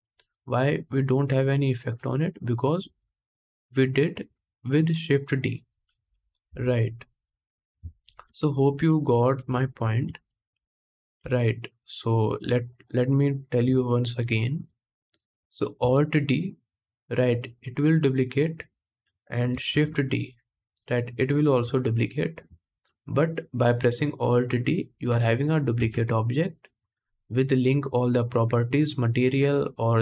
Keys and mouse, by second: 11.9 ctrl+z, 11.9 x, 15.6 alt+d, 17.0-18.3 drag, 18.3-20.5 middle drag, 19.4 shift+d, 20.5-25.0 drag, 22.7 middle click, 23.4-25.0 right drag, 25.0-28.5 middle drag, 25.4 Tab, 28.7-30.0 middle drag.